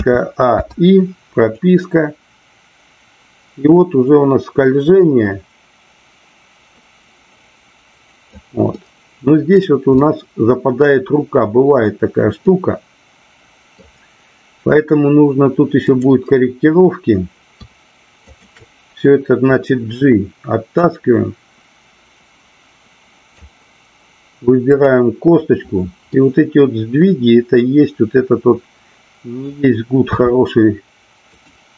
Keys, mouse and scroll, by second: 1.5-8.4 drag, 8.8 middle click, 10.0 middle click, 12.5-13.8 middle drag, 18.2-18.7 shift+drag, 20.9-23.4 drag, 26.1-29.5 middle drag, 30.1 r, 31.2 click.